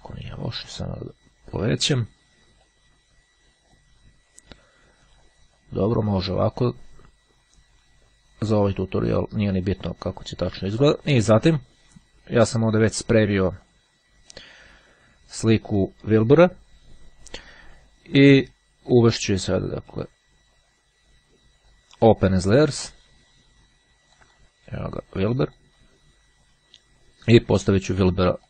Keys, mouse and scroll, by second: 0.2-1.3 drag, 2.7-4.3 drag, 13.7 click, 22.5 click, 24.3 click, 25.6 click.